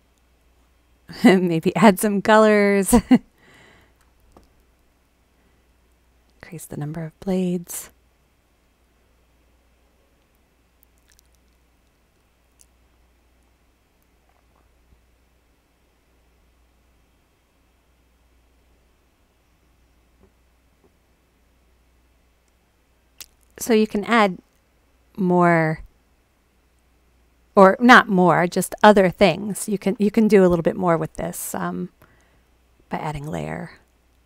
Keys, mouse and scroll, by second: 1.8 click, 2.5 click, 3.0 click, 3.5 click, 5.4 click, 6.2 click, 6.4 click, 7.6 click.